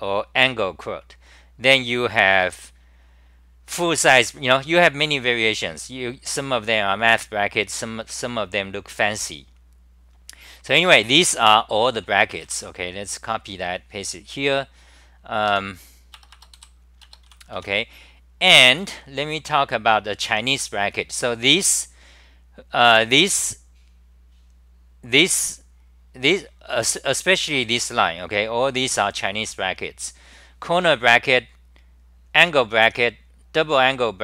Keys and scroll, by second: 15.5 s, 16.1 Return, 16.5 Return, 16.5 k, 17.6 Home.